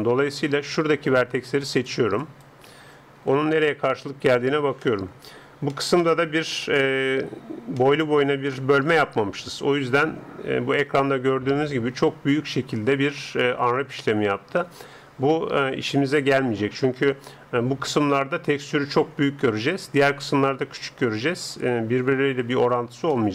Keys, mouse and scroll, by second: 3.0 click, 3.6 middle click, 3.7 click, 3.8 middle click, 4.1 click, 4.2-10.9 middle drag, 23.1-23.3 middle drag.